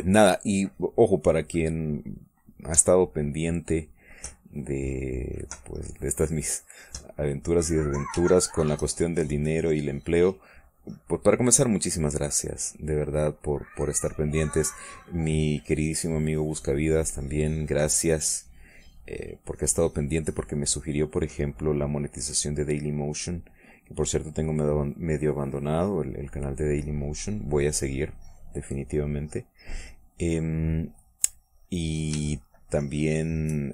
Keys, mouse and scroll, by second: 5.5-7.2 drag, 7.5-8.9 drag, 9.1-15.4 shift+drag, 15.7-20.7 drag, 21.6-23.6 drag, 24.0-26.7 drag, 26.8 click, 27.9-29.1 drag, 29.3 click, 31.1 middle click, 31.8 middle click, 32.4 middle click, 33.3-33.7 shift+drag.